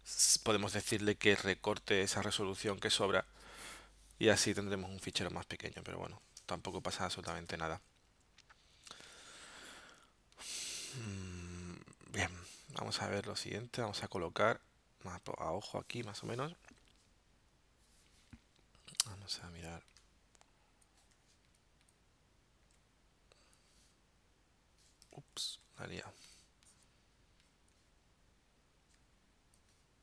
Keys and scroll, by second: 5.2 z, 6.4 space, 7.5 v, 25.2 super+z.